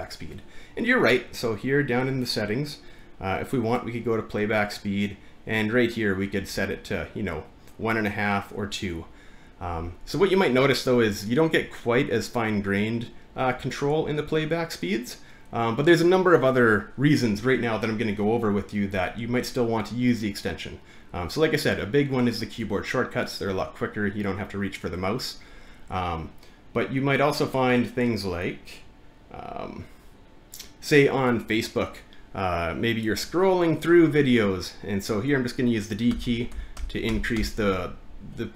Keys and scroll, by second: 36.1-37.4 typing.